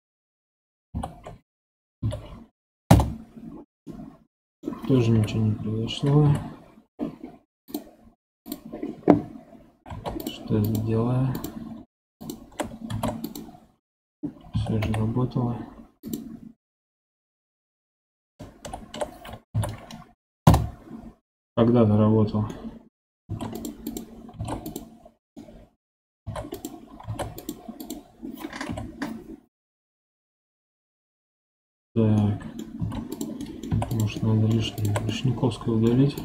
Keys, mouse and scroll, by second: 0.8 ctrl+l, 2.0 F3, 3.8-5.0 middle drag, 5.0 KP_1, 6.1 KP_7, 7.6-9.8 drag, 9.8 ctrl+Tab, 10.5 click, 11.2 click, 12.1 shift+click, 12.8 ctrl+Tab, 14.4 3, 14.7 a, 15.9 click, 18.5 ctrl+l, 19.5 F3, 22.4 middle click, 23.2 ctrl+Tab, 23.8 click, 24.3 ctrl+Tab, 25.3 middle click, 26.1 ctrl+Tab, 26.4 click, 27.0 ctrl+Tab, 27.7 click, 28.6 KP_7, 32.1-32.7 middle drag, 32.7 ctrl+Tab, 33.3 middle click, 33.6 3, 33.8 click, 34.1 middle click, 34.7 shift+click, 35.0-36.1 middle drag, 36.1 shift+click.